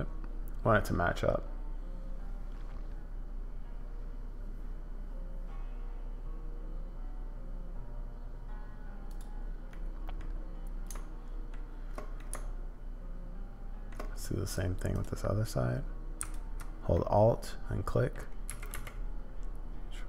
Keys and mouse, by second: 9.7 middle click, 12.2 shift+middle click, 12.7 shift+click, 13.3 shift+middle click, 16.9-18.1 middle drag, 18.5 g.